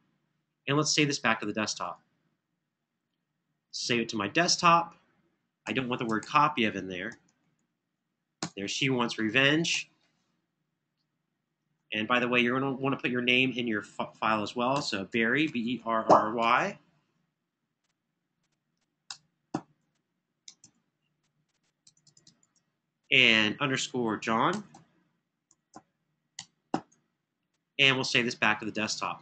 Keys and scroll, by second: 5.4 Left, 6.0 Right, 6.2 Right, 8.2 BackSpace, 10.0 Right, 10.1 Right, 11.6 Left, 12.3 Left, 13.0 Left, 14.3-16.2 typing, 19.1-19.9 typing, 20.4 super+Tab, 24.4-27.0 typing.